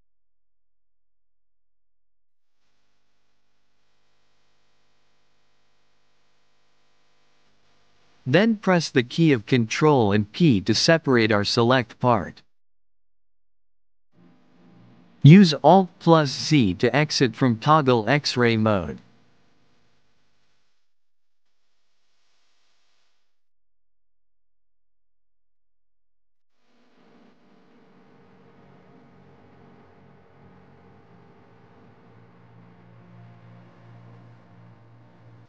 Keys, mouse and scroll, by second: 1.1 KP_1, 3.7 KP_Subtract, 4.8 KP_Add, 6.1-6.9 scroll up 2, 9.2 ctrl+p, 11.4 p, 13.6 Tab, 14.2-15.4 middle drag, 15.4 click, 16.2-17.2 middle drag, 17.2 alt+z, 18.0 middle click, 19.0 KP_1, 21.3 click, 22.1 Tab, 24.8 shift+middle click, 26.3 ctrl+click, 27.4 ctrl+click, 28.2 ctrl+click, 28.9-30.9 middle drag, 31.7 s, 34.0-35.4 middle drag.